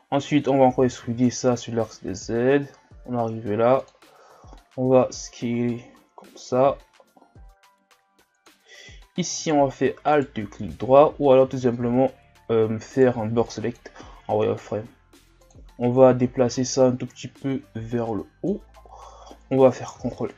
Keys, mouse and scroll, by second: 0.8 e, 9.3-11.5 alt+right drag, 11.5 z, 12.0-12.9 scroll up 2, 12.9 right click, 13.1 b, 14.1-15.4 scroll down 3, 15.4-18.7 drag, 18.7 scroll up 3, 19.9 ctrl+r.